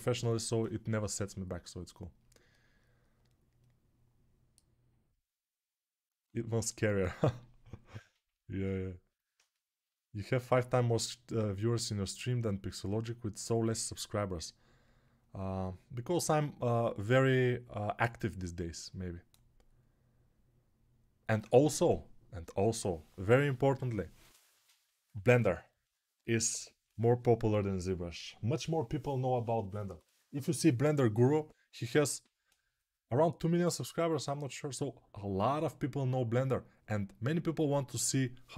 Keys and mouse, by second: 30.4-38.5 middle drag.